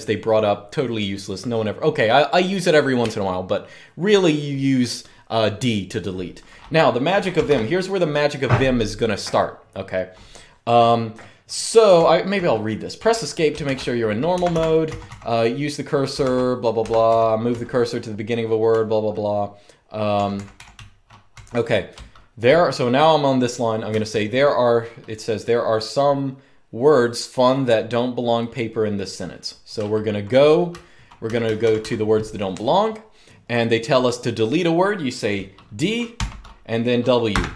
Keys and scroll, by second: 6.8-7.7 typing, 11.7-12.2 typing, 13.4 shift+v, 14.2 Escape, 14.3 Escape, 14.4-17.2 typing, 16.6 Escape, 18.4 typing, 20.1-21.3 typing, 23.4-24.5 typing, 29.3-31.3 typing, 35.9 typing, 37.0 typing.